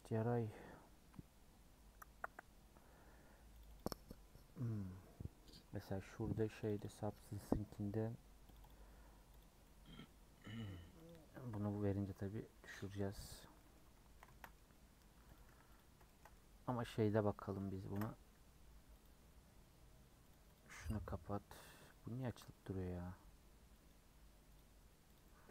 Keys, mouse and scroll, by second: 9.7-12.9 middle drag, 12.9 click, 13.6-15.7 middle drag, 15.7 click, 16.0-17.2 shift+middle drag, 17.2 scroll up 2.